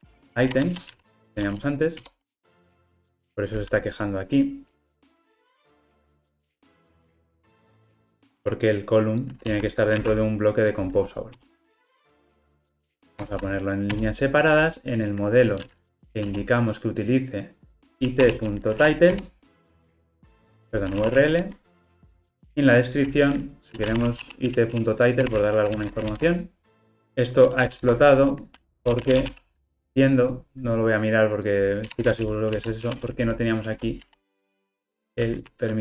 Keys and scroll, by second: 2.1 Return, 2.9 Return, 5.2 alt+Return, 7.0 Return, 9.4 super+x, 9.9 super+v, 13.2 alt+Return, 19.2 Return, 25.3 Return, 26.1 ctrl+alt+o, 35.1 Return.